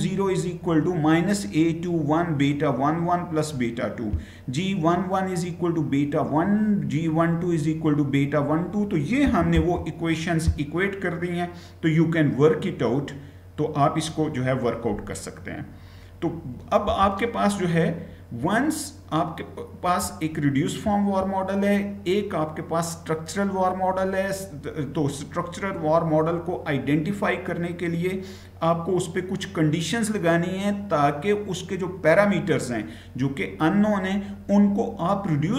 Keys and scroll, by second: 9.3 Right, 9.6 Right.